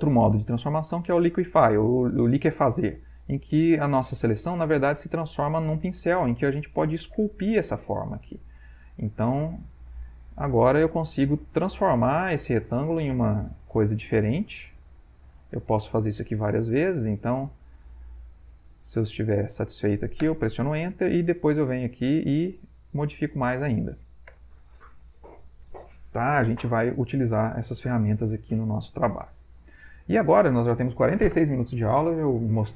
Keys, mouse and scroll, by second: 0.9 click, 3.1 click, 3.9-5.0 drag, 5.2-7.7 drag, 7.8 click, 8.4 click, 9.1-10.4 drag, 10.6-12.3 drag, 12.9 click, 13.5 click, 13.9-16.8 drag, 17.0 click, 18.2 click, 18.9 click, 19.5 click, 20.3 Return, 21.0 click, 21.6 click, 22.5 click, 23.5 click, 24.3 Return.